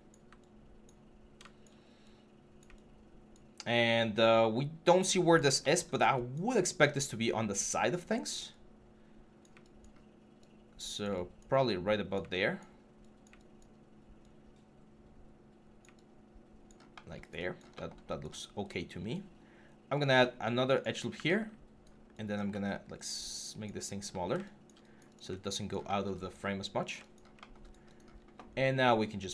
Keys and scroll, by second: 0.0 w.